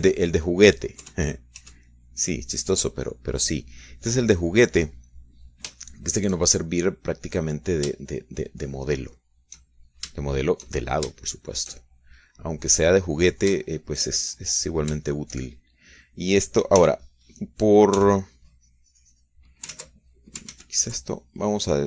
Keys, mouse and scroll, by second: 0.1 KP_Subtract, 1.6 click, 2.4 KP_Add, 3.3-4.3 middle drag, 5.4 middle click, 7.2 shift+middle click, 8.7 middle click, 9.4 shift+middle click, 10.0 shift+middle click, 11.1 shift+middle click, 11.6 shift+middle click, 12.2-13.2 shift+middle drag, 14.0-15.0 drag, 15.0 shift+middle click, 15.1 shift+click, 15.5 shift+middle click, 15.9 click, 16.9-18.5 shift+middle drag, 18.2 f, 18.5 click, 18.8 middle click, 19.4 f, 19.6 click, 19.9-21.0 drag, 21.1 ctrl+z.